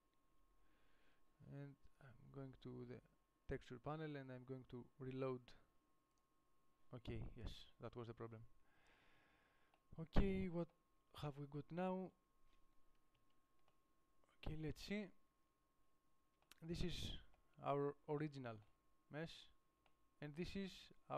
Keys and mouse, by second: 0.0-2.7 middle drag, 7.5-9.0 drag, 13.4 KP_5.